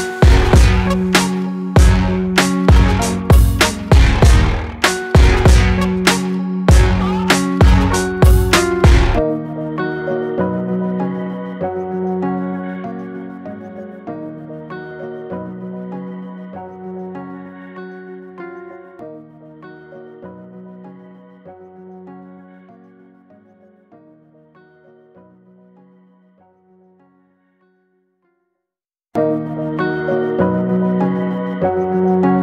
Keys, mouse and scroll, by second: 0.3 scroll down 1, 0.6 middle click, 1.3 Tab, 2.3 shift+a, 5.6 alt+middle click, 6.0 scroll up 1, 6.3 shift+middle click, 7.2 s, 8.5 scroll up 3, 8.8-9.8 shift+middle drag, 9.8 s, 11.8-12.4 shift+middle drag, 12.4 g, 14.2 alt+middle click, 14.5 scroll up 2, 14.9 shift+middle click, 15.3 scroll down 3, 15.5-17.5 shift+middle drag, 17.7 alt+middle click, 18.2 shift+middle drag, 18.5-19.2 scroll up 1, 19.3 g, 22.8 alt+middle click, 23.2 scroll up 2, 24.0 g, 27.9 Tab, 28.5 click, 29.8 click, 30.5 alt+click, 31.6 s.